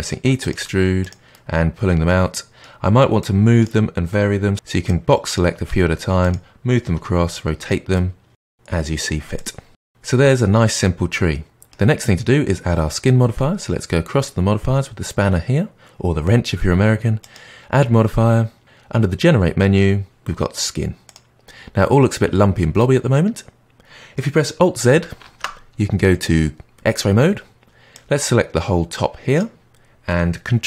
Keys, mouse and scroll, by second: 0.4 click, 0.5 e, 1.2-3.1 middle drag, 3.1 click, 4.8 click, 5.6 g, 6.8 r, 7.9 middle click, 8.7 click, 9.2 e, 9.9 middle click, 17.2 click, 25.2 alt+z, 27.9 click.